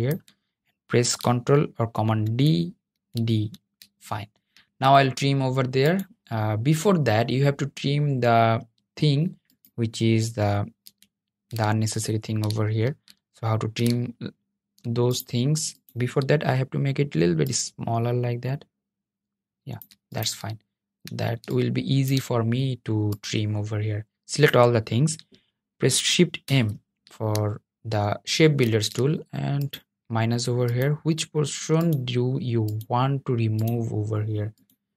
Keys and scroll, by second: 1.3 super+d, 2.0 super+d, 25.1 shift+m.